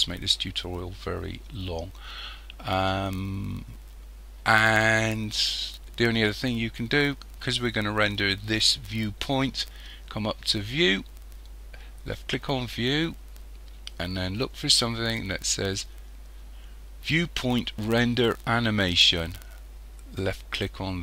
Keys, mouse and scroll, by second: 20.8 click.